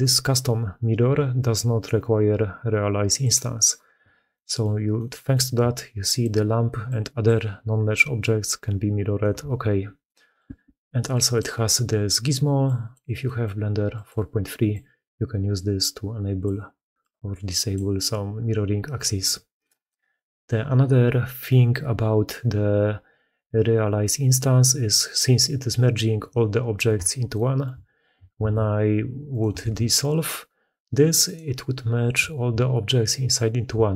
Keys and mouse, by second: 3.1 middle click, 4.2-4.5 middle drag, 4.8 middle click, 5.4-8.0 d, 5.6 click, 6.7 click, 8.6 click, 8.6 d, 9.1 d, 9.9-10.2 drag, 9.9 d, 11.0-11.3 drag, 12.5 drag, 13.1 click, 13.8 drag, 14.6-16.3 drag, 16.9-17.6 drag, 27.2 shift+middle click, 28.2 ctrl+x, 29.5 ctrl+x, 33.8 shift+middle drag.